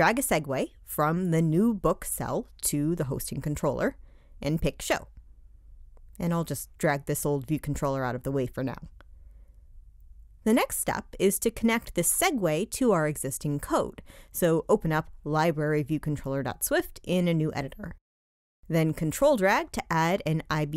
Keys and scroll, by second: 14.7 shift+super+o.